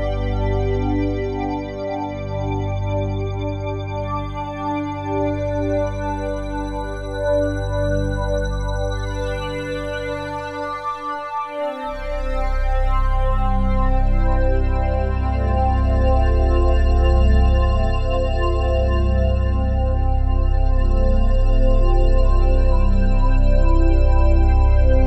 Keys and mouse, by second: 2.2 click, 3.3 ctrl+s, 8.2 click, 9.7 click, 11.4 click, 12.8 click, 13.8 click, 14.3-14.7 drag, 16.1 ctrl+s, 17.1 click, 18.4-21.5 alt+drag, 21.5 ctrl+s, 24.0-25.0 drag.